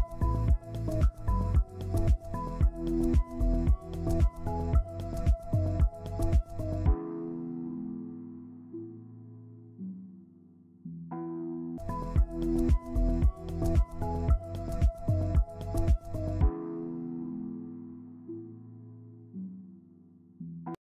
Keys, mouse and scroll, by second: 0.8 scroll down 1, 0.8 scroll up 1, 1.3 scroll down 1, 5.0-6.9 scroll up 1, 6.9 scroll down 1, 10.8 ctrl+space, 11.9 typing, 16.0 ctrl+space.